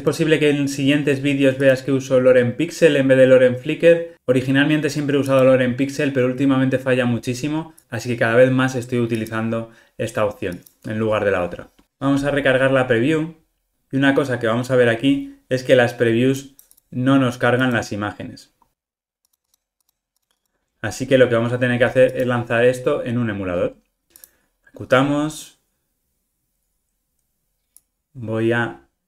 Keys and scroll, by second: 19.3 super+-, 24.2 ctrl+r.